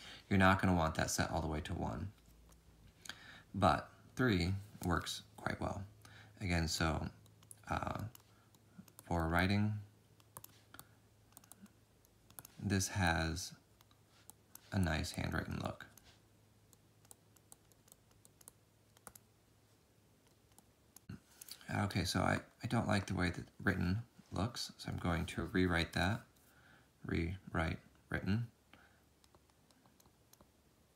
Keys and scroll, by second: 0.1 ctrl+z, 0.7 ctrl+z, 1.3 ctrl+z, 1.5 ctrl+z, 2.3 ctrl+z.